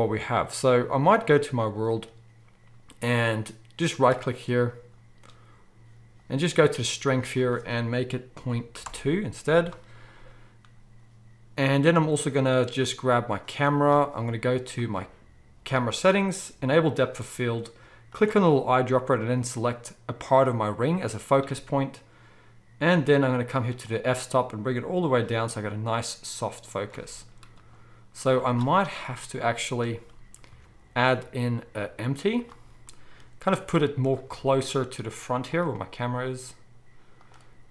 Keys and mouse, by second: 2.1-4.0 middle drag, 4.0-9.9 right drag, 7.2-9.9 drag, 7.2-9.9 middle drag, 13.5-14.7 drag, 14.8-16.8 drag, 16.9-18.0 drag, 18.2-23.8 drag, 28.2-29.3 drag, 28.2-29.3 middle drag, 28.2-29.3 right drag, 28.2 z, 30.5 shift+a, 33.6 g, 34.1-37.7 right drag, 34.2 s, 35.7 g.